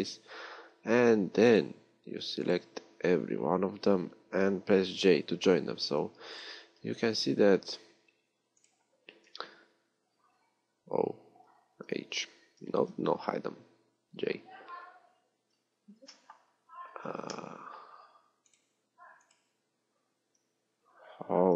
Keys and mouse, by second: 12.9 alt+h, 14.4 j.